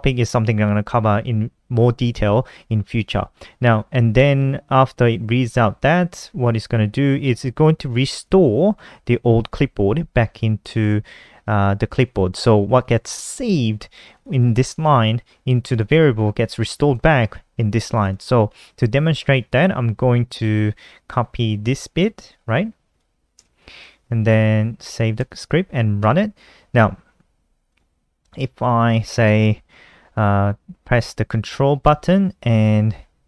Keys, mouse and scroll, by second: 7.7 click, 10.1 click, 10.3 click, 13.7 click, 13.8 click, 15.2 click, 15.9 click, 16.4 click, 16.6 click, 17.4 click, 17.5 click, 21.6 click, 22.9 ctrl+c, 23.3 click, 24.7 ctrl+s, 25.5 F5, 27.2 click.